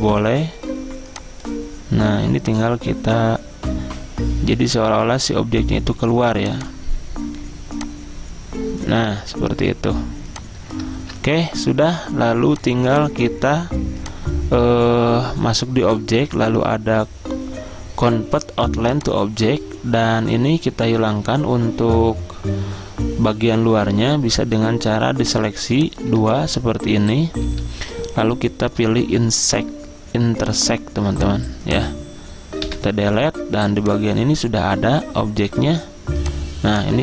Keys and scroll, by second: 11.1 ctrl+z, 26.5 ctrl+x, 27.4 ctrl+z, 27.7 ctrl+z, 32.8 Delete.